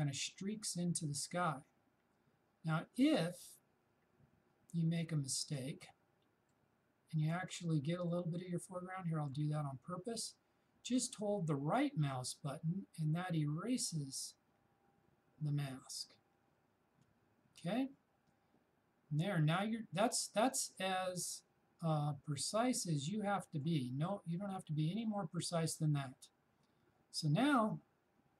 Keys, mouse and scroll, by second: 12.0-19.7 shift+right drag, 22.4-26.0 shift+drag.